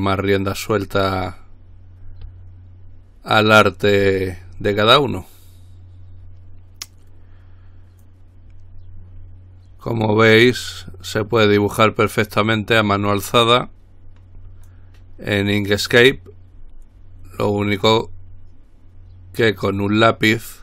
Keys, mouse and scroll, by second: 8.3-11.2 drag, 11.8-15.4 drag, 16.4-20.6 drag.